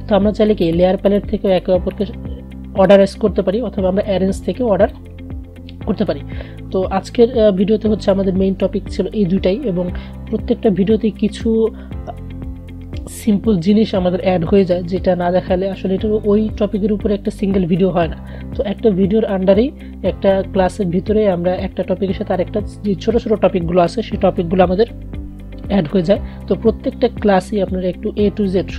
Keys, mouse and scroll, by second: 0.8-7.4 drag, 7.9 Delete.